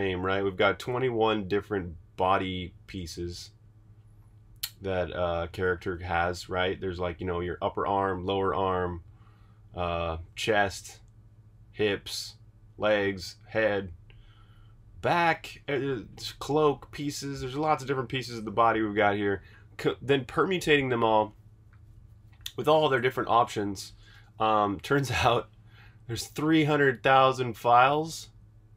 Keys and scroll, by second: 18.5 super+Tab, 24.1 super+Tab, 24.7 super+Tab, 24.8 super+Tab.